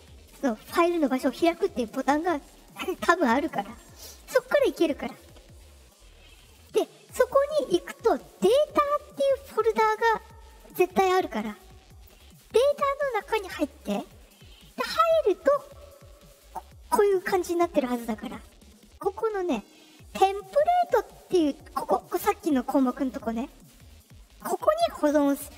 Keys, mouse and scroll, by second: 6.4 click, 8.6 click, 12.6 click, 13.9 click, 20.5 click, 20.7 click, 25.3 click.